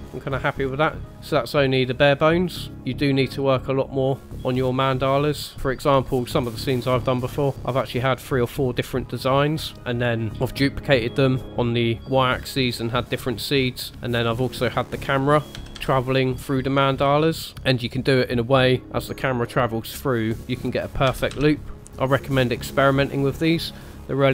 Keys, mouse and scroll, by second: 0.1 scroll down 2, 0.7 scroll up 1, 1.1 click, 1.1 space, 2.7 click, 3.1 click, 5.6 middle click, 5.6 scroll down 2, 5.8 shift+middle click, 6.7 middle click, 9.7 shift+middle click, 13.6-13.9 scroll down 2, 13.9 scroll up 2, 14.8 click, 15.6 g, 21.1 g, 23.1-23.5 scroll down 1.